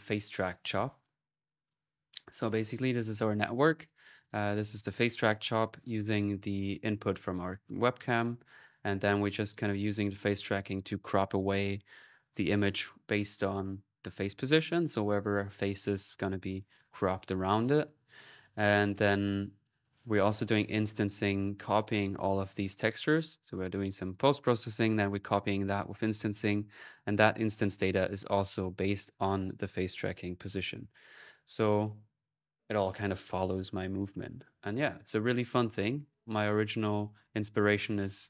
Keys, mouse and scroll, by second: 2.0 click, 4.0 click, 8.1-9.5 drag, 18.3-21.9 drag, 22.4-23.7 middle drag, 24.4 middle click, 25.3 click, 35.3-36.5 drag.